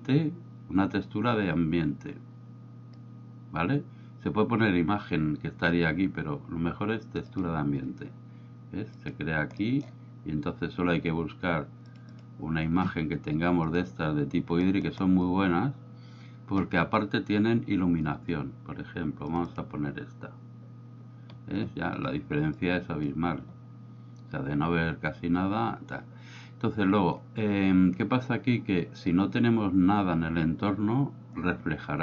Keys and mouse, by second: 9.0 click, 9.6 middle click, 12.2 click, 22.7-23.1 drag.